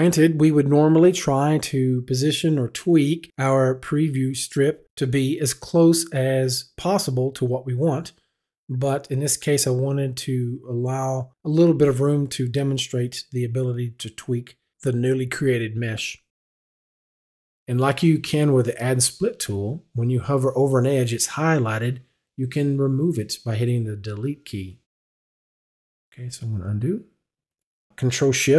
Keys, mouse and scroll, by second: 0.0 right click, 0.6 right click, 1.4 right click, 1.9 right click, 2.9 right click, 3.6 right click, 4.4 right click, 5.3 right click, 6.1 right click, 7.7 right click, 8.7 right click, 9.3 right click, 10.8 right click, 12.0 right click, 13.4 right click, 14.5 right click, 15.9 right click, 24.6 Delete, 26.8 ctrl+z.